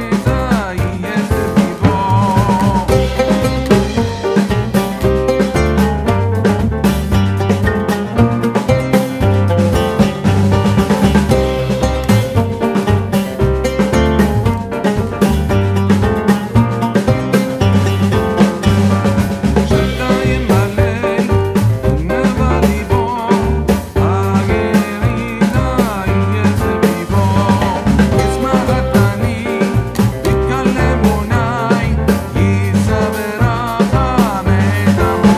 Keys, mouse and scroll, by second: 3.7-5.3 drag, 5.3-6.6 drag, 6.6-8.9 drag, 11.3 right click, 11.8 click, 15.0-17.8 drag, 21.4-24.8 drag, 24.9-27.8 drag, 27.8 ctrl+g, 28.5-33.0 drag, 33.0 click, 33.0-35.3 drag.